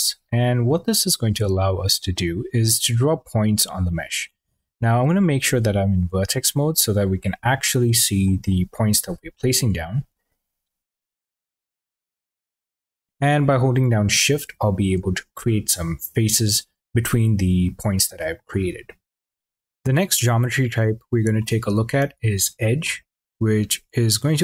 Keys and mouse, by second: 4.8 1, 6.1 click, 7.0 click, 7.7 click, 10.2 click, 10.8 click, 11.3 click, 12.4 middle click, 13.2 shift+click, 13.9 shift+click, 14.6 shift+click, 15.1 drag, 19.0 click, 21.2 click, 22.8 click, 23.8 click.